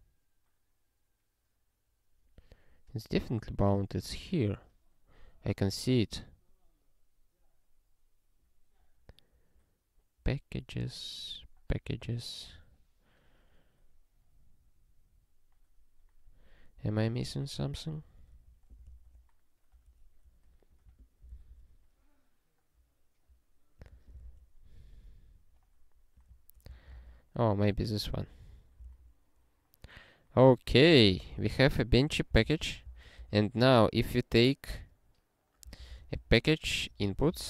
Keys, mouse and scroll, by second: 3.1 click, 18.2 click, 18.9 ctrl+e, 20.7 click, 21.3 ctrl+e, 23.8 click, 24.4 ctrl+e, 24.9 scroll down 1, 26.2 click, 26.7 ctrl+n, 26.9 ctrl+e, 27.5 scroll down 1, 28.3 click, 28.9 ctrl+e, 30.7 ctrl+p, 30.9 ctrl+p, 31.1 ctrl+e, 32.3 ctrl+n, 32.5 ctrl+n, 32.8 Return, 33.2 (, 35.4-37.4 typing.